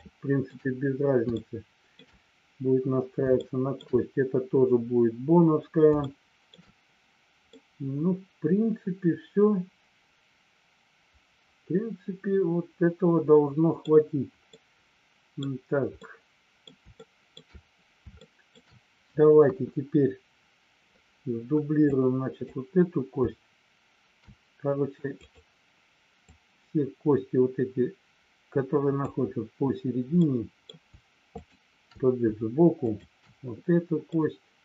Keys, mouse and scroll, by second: 1.3 shift+middle click, 3.4 shift+middle click, 6.0 shift+middle click, 7.5-13.8 middle drag, 14.5 middle click, 15.9 middle click, 16.9 shift+middle click, 18.2 shift+middle click, 19.4 KP_1, 21.8 click, 25.0 click, 26.2-29.2 drag, 30.2 middle click, 31.3 shift+click, 32.8 shift+click, 34.0-34.6 middle drag.